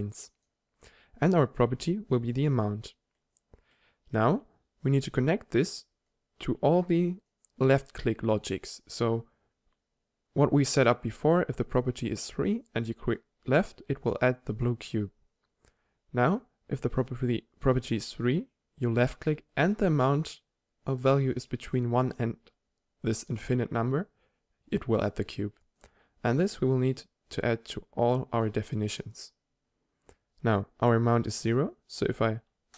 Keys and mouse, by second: 2.2-6.0 middle drag, 8.0-25.7 drag, 8.0-25.7 middle drag, 8.0-25.7 right drag, 29.4-32.7 middle drag, 32.7 click.